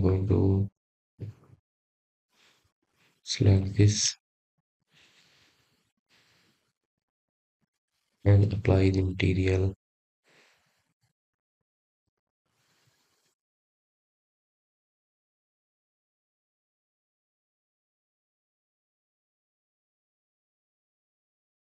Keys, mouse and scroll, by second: 0.1 click, 0.8 click, 2.1 click, 3.2-6.0 drag, 6.8 click, 7.5 click, 8.0 click, 8.4-8.9 scroll down 3, 8.9-9.5 middle drag, 9.5 click, 10.8 click, 12.6 click, 17.2 click, 17.7-18.1 scroll down 3, 18.2 click, 19.1-19.5 scroll up 3, 19.6 click.